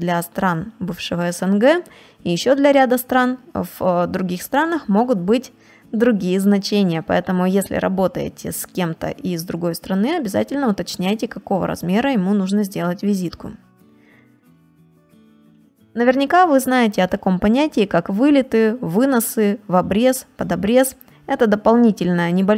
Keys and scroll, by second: 13.2 ctrl+space, 13.7 space.